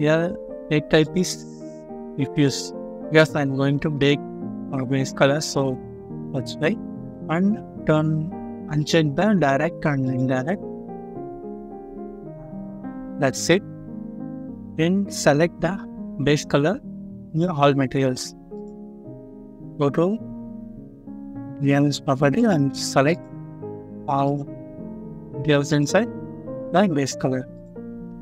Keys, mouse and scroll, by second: 3.0 scroll up 1, 3.6 middle click, 11.8 scroll down 1, 13.0 scroll up 1, 15.3 scroll up 1, 23.3 scroll down 1, 25.0 middle click, 26.0-26.7 scroll up 1, 28.0 scroll down 1.